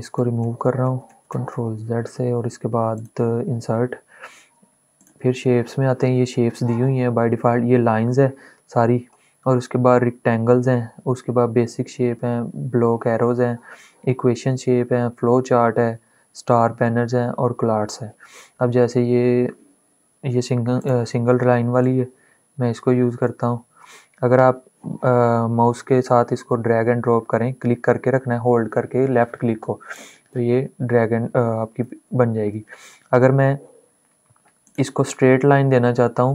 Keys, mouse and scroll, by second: 2.8 click, 17.9-19.6 scroll down 1, 20.6 click, 21.5-31.6 shift+drag, 25.2-29.6 drag, 31.6 ctrl+z, 34.3-36.3 drag.